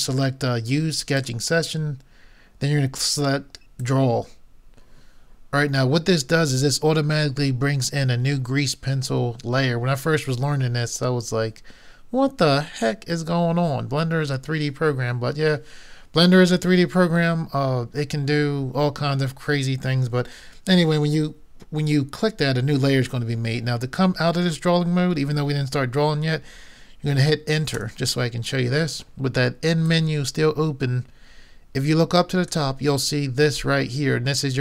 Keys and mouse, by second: 1.1-3.0 drag, 3.8-5.5 drag, 29.9-31.7 drag.